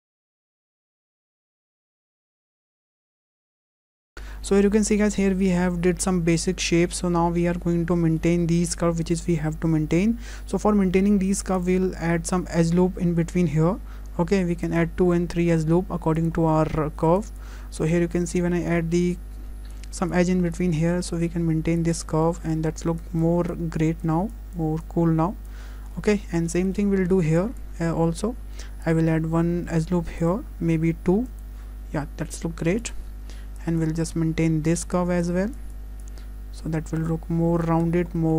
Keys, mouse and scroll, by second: 0.0 click, 0.4 scroll up 2, 0.7 shift+middle click, 0.7-3.4 typing, 0.7 shift+middle click, 0.8 click, 1.0 click, 1.0 shift+middle click, 1.0 scroll down 3, 1.1 click, 1.2 shift+middle click, 1.4 click, 1.5 click, 1.5 shift+middle click, 1.6 click, 1.6 shift+middle click, 1.7 click, 1.9 shift+middle click, 2.0 shift+middle click, 2.2 click, 2.2 scroll up 1, 2.3 click, 2.4 shift+middle click, 2.5 click, 2.6 shift+middle click, 2.7 shift+middle click, 2.9 click, 3.0 click, 3.3 click, 3.3 shift+middle click, 3.4 click, 3.5-4.0 click, 3.5 click, 3.6 click, 4.1 scroll down 2, 4.3 shift+middle click, 4.3-4.8 scroll up 1, 7.8 scroll up 2, 8.2 shift+middle click, 11.6 click, 13.4 click, 16.2 click, 16.5 scroll up 3, 17.2 click, 19.1 click, 21.8 click, 22.0 scroll down 3, 22.2 shift+middle click, 22.6-23.0 scroll up 2, 23.0 click, 24.0 click, 25.5 click, 25.7-26.0 scroll down 3, 26.0 shift+middle click, 26.3 scroll up 1, 26.5 shift+middle click, 27.4 click, 28.9 click, 31.3 click, 32.8 click, 34.1 click, 35.5 click, 36.0 click, 37.9 scroll down 2, 38.2 shift+middle click.